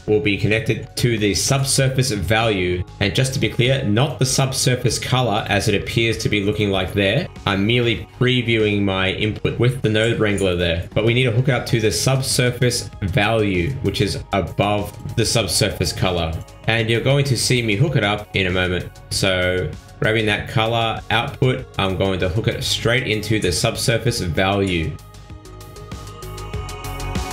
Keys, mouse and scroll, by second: 5.0 scroll down 1, 6.8 middle click, 8.7 scroll down 2, 9.4 middle click, 11.3 middle click, 11.7-13.7 scroll up 6, 13.7 middle click, 14.7 middle click, 15.1 middle click, 15.9 click, 16.8 click, 17.7 middle click, 18.7 middle click, 19.5 scroll up 1, 20.0 scroll down 1, 20.3 middle click, 22.0 click, 23.7 middle click, 24.5 middle click, 25.5 click.